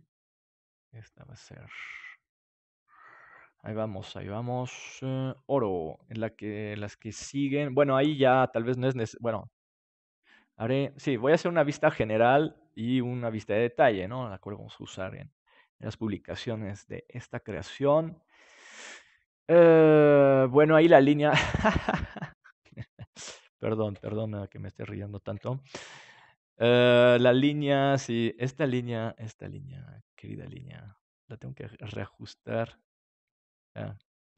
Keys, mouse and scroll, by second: 4.3-7.1 drag, 7.1 ctrl+s, 7.1-11.4 middle drag, 12.3-15.7 middle drag, 17.1-22.1 drag, 25.3 KP_7, 26.2-28.3 middle drag, 28.3-29.9 right drag, 29.9 Tab, 31.8-34.1 drag, 34.1-34.3 right drag.